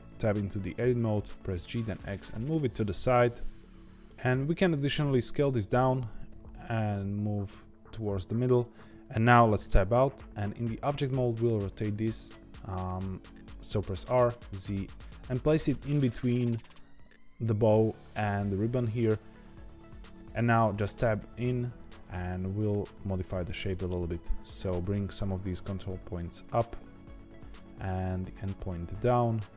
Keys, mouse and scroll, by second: 1.4 g, 3.7-5.0 middle drag, 5.0 s, 8.7 Tab, 9.2-13.8 middle drag, 13.8 r, 15.0-16.8 middle drag, 20.8 Tab, 21.1 middle click, 21.9 click, 23.2-24.6 middle drag, 24.6 shift+click, 25.0 g, 26.6 click, 26.8 g, 27.5 click, 27.8 g, 29.1 click, 29.4 g.